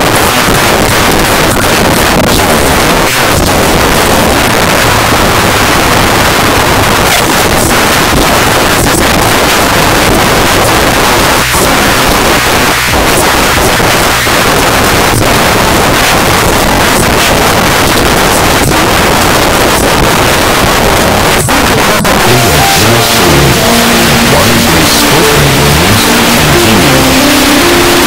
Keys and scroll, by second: 0.1 Down, 0.2 Down, 0.4 Down, 0.7 Down, 1.1 Return.